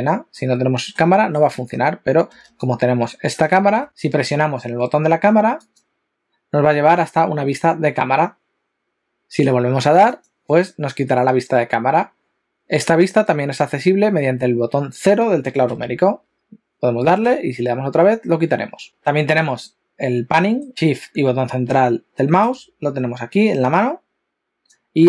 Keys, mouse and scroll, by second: 0.3 middle click, 1.2 shift+middle click, 3.9 click, 5.6 click, 10.2 click, 15.7 KP_0, 17.3 KP_0, 20.3 middle click, 20.7 shift+middle click, 21.5 shift+middle click, 23.3 click.